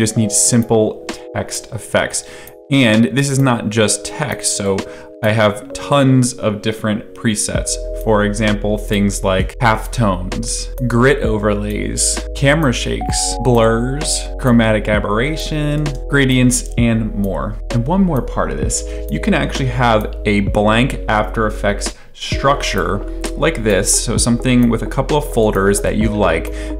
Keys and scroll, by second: 10.7 space, 12.2 space, 13.3 space, 14.3 space, 15.7 space.